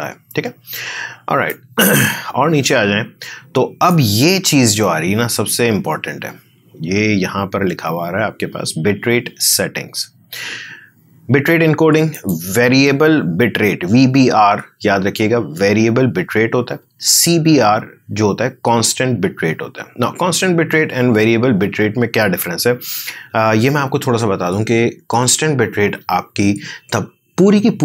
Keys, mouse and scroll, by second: 1.4-6.3 drag, 12.1 click.